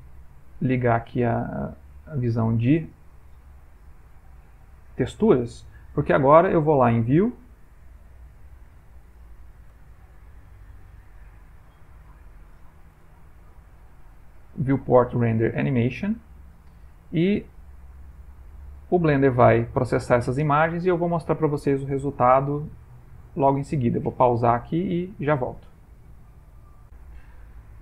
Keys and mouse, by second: 1.6 shift+middle click, 7.1 click, 9.9 ctrl+middle click, 10.0 middle click, 13.1 click, 13.1 n, 14.4 click.